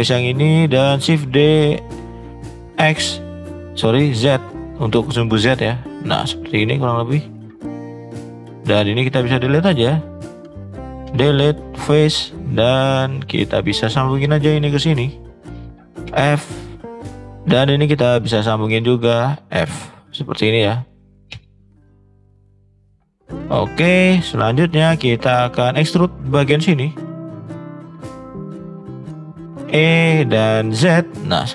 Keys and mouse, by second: 0.3 shift+middle click, 1.1 shift+d, 6.7 middle click, 7.8 shift+middle click, 8.2 middle click, 8.9 click, 9.3 shift+click, 12.1 shift+middle click, 12.5 middle click, 13.7 click, 15.0 shift+click, 16.0 f, 16.9 click, 17.4 middle click, 18.5 click, 21.3 f, 21.8 middle click, 22.5 click, 22.9 middle click, 23.5 shift+middle click, 23.9 middle click, 24.2 middle click, 24.8 middle click, 25.2 shift+middle click, 26.9 shift+click, 28.0 click, 28.7 shift+middle click, 29.5 e.